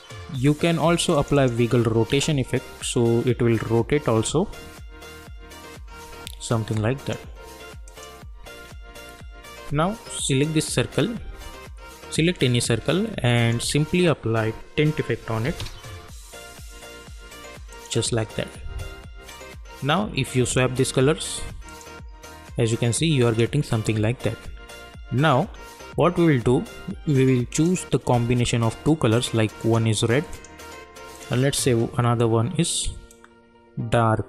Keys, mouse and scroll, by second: 1.1 click, 2.1 space, 6.0 space, 6.7 click, 8.9 u, 10.3 click, 13.3 click, 13.7 ctrl+a, 14.6-16.1 typing, 17.7 click, 20.4 click, 24.9-25.5 scroll down 1, 25.5 scroll up 1, 27.5-34.2 drag.